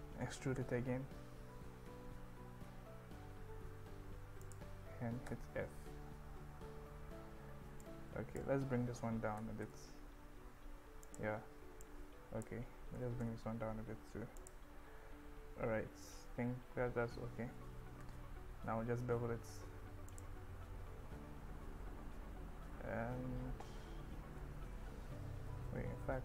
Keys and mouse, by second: 0.6 z, 4.4 click, 7.9 click, 9.4 g, 9.7 z, 11.1 click, 11.9 click, 13.0 g, 13.2 z, 14.4 click, 18.0 ctrl+b, 20.1 click, 24.5-25.5 ctrl+z.